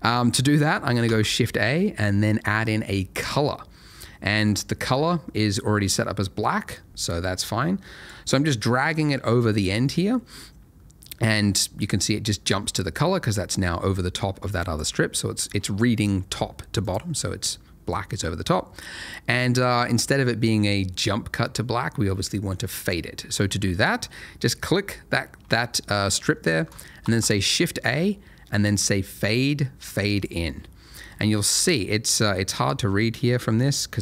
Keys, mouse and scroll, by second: 1.0 shift+a, 3.2 click, 6.7 click, 14.7 click, 17.9 click, 22.9 click, 27.0 shift+a, 30.1 click, 31.0-31.5 scroll up 1, 31.5-32.2 scroll down 1, 32.2 click.